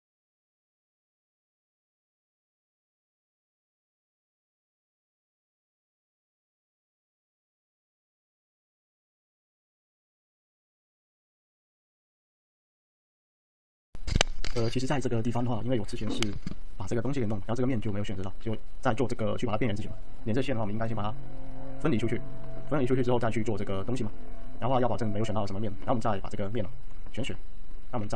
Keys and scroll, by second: 2.3 x, 2.8 x, 4.4 x, 5.8 z, 7.2 ctrl+z, 9.6 t, 13.6 ctrl+F1, 20.5 alt+d, 26.8 ctrl+a, 27.6 alt+z.